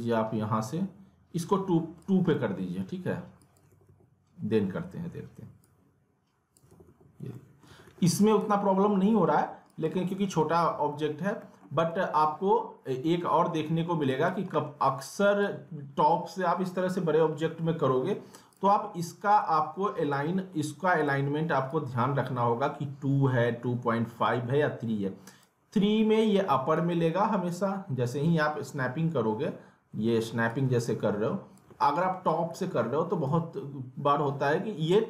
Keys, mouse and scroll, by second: 2.3 alt+middle click, 3.4 click, 3.7 alt+w, 5.6 click, 6.7 alt+w, 7.3 alt+middle click, 7.7 alt+w, 8.4 ctrl+z, 9.7 click, 9.9 typing, 10.9 alt+middle click, 12.7-13.0 scroll up 1, 13.6 scroll down 1, 13.6 alt+middle click, 14.1 click, 15.2 right click, 18.5 click, 19.4-21.0 right drag, 21.0-26.7 drag, 30.5-31.8 drag, 31.8 alt+w, 32.5 alt+w.